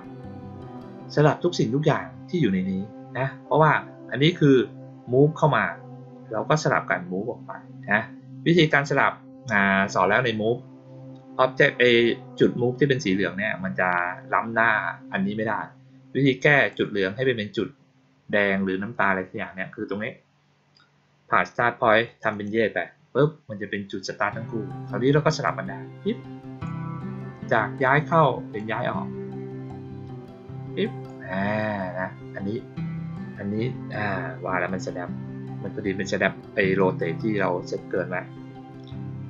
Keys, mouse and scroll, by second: 8.5 click, 16.5 click, 22.0 click, 22.2 click, 25.4-26.6 drag, 27.8-28.5 drag, 29.6-31.0 drag.